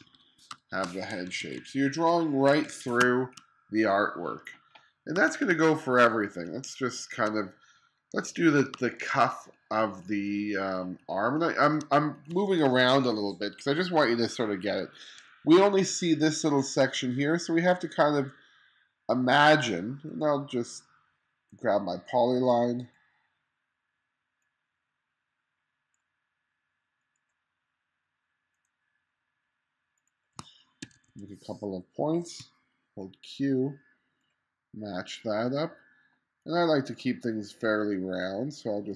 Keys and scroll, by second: 0.0-3.0 typing, 5.2 space, 8.8 space, 30.9 2, 32.4 q.